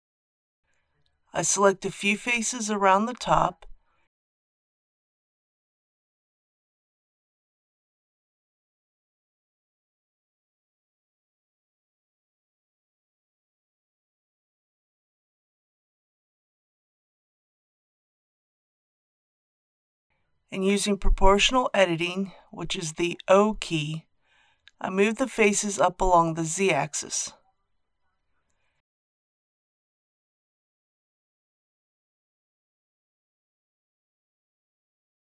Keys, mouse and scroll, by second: 1.8 scroll up 1, 1.8-2.9 middle drag, 2.9-3.2 scroll up 1, 4.1 click, 4.8 shift+click, 5.7 shift+click, 6.2 shift+click, 6.8 shift+click, 7.9 shift+click, 8.6 shift+click, 9.6 shift+click, 12.8 shift+click, 15.3-16.8 middle drag, 17.3 KP_1, 18.6 shift+middle click, 20.3 o, 23.7 g, 24.8 z, 25.7 scroll down 1, 26.4-26.9 scroll up 1, 31.0 scroll up 1, 31.7 click, 32.4-34.8 middle drag.